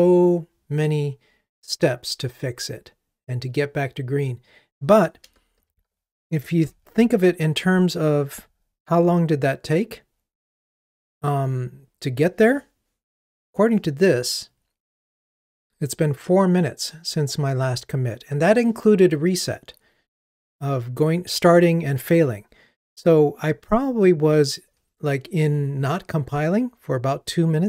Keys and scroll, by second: 6.7 super+9.